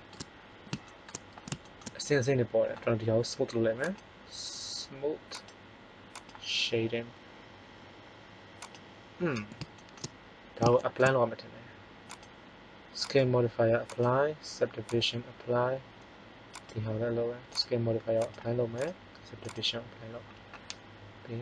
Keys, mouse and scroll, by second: 3.8-5.3 drag, 5.3-7.0 right drag.